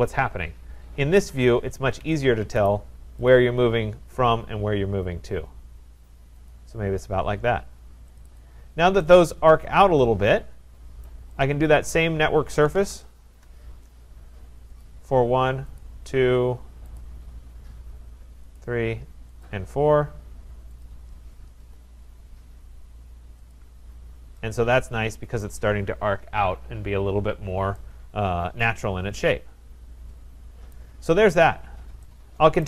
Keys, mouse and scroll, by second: 1.1 click, 2.0 Escape, 2.7 right click, 3.3 click, 6.5 click, 8.2 click, 8.4 click, 11.0 right click, 11.4 click, 11.9-12.6 scroll, 12.4-13.3 typing, 14.8 click, 15.8 click, 16.1 Return, 16.1 middle click, 17.0 click, 18.6 click, 19.4 click, 20.8 click, 21.6 Return, 23.5 click, 24.0-24.6 scroll, 25.4 right click, 26.6 middle click, 30.1 right click, 30.7 right click.